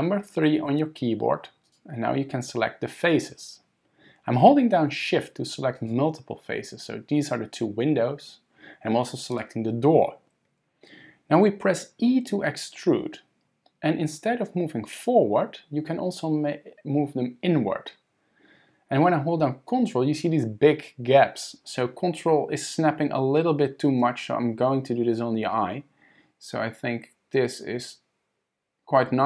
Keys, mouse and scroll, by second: 0.7 3, 1.6 click, 5.8 shift+click, 9.3 shift+click, 13.0 e.